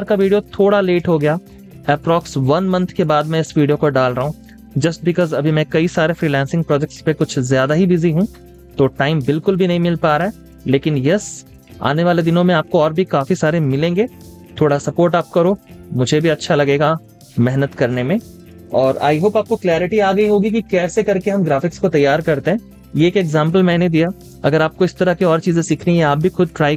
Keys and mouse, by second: 1.8 space, 2.0 double click, 2.3 space, 4.9 z, 7.3 typing, 9.2-10.2 typing, 10.9 double click, 11.3-16.9 typing, 11.8 double click, 12.9 double click, 13.9 double click, 17.7 double click, 18.1 space, 18.6 v.